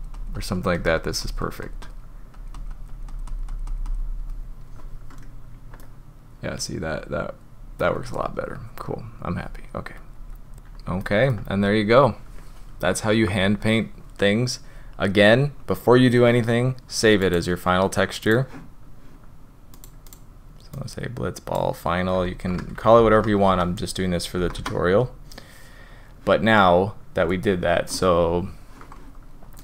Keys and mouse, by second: 0.1 click, 0.3 click, 0.5 click, 0.7 click, 1.0 click, 1.2 click, 1.4 click, 1.6 drag, 1.8 drag, 2.3 drag, 2.9 click, 3.1 click, 3.3 click, 3.5 drag, 3.7 click, 3.9 drag, 5.8-7.8 middle drag, 10.0 click, 11.0 shift+middle drag, 17.3-18.5 drag.